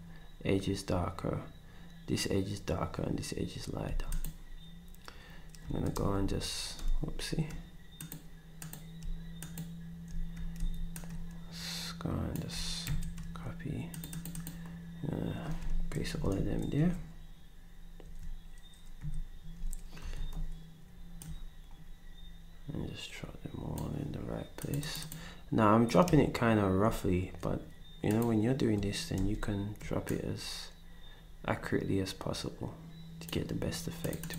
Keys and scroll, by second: 3.9 s, 5.9 v, 6.8 z, 10.6 d, 12.9 c, 16.1 alt+Up, 16.8 Left, 18.0 Left, 19.0 Right, 20.1 d, 29.2 ctrl+v.